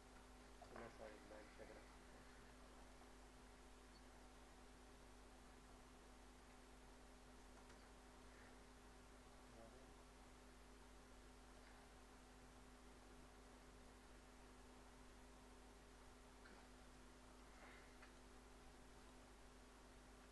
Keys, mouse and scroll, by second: 0.8 middle click, 1.3 shift+middle click, 2.1 scroll up 1, 2.5 scroll down 1, 2.8 click, 6.5-9.5 drag, 9.5-13.9 drag, 16.6 click, 18.9 right click.